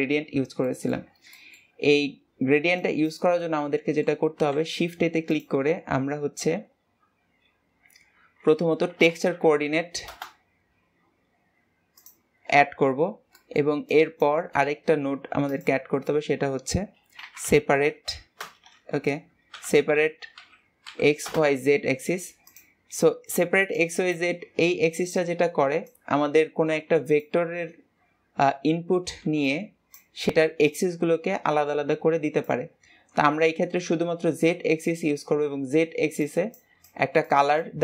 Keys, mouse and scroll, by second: 0.0 g, 3.2-26.3 drag.